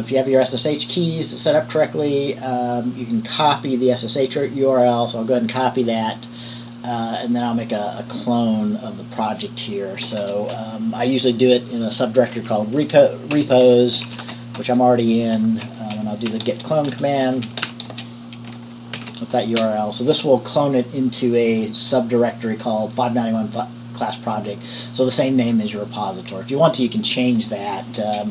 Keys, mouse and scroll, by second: 0.1 click, 4.5 click, 6.7 click, 6.9-9.6 drag, 10.2 Return, 10.4 Return, 13.0 typing, 14.5-18.6 typing, 19.2 ctrl+v, 19.8 Right.